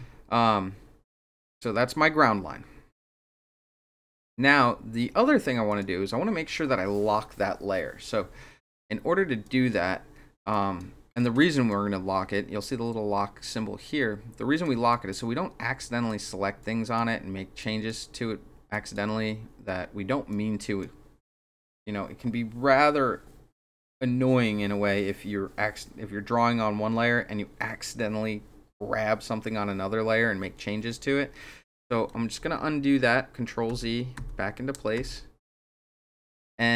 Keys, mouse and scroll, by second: 5.7 click, 8.6 click, 9.4 click, 10.5 click, 11.4 click, 14.6 click, 14.9 click, 15.8 drag, 16.6-17.0 drag, 17.6 click, 18.7 click, 20.3 click, 32.4 ctrl+z, 33.7 ctrl+z, 34.2 ctrl+z, 35.0 ctrl+z, 35.7 ctrl+z.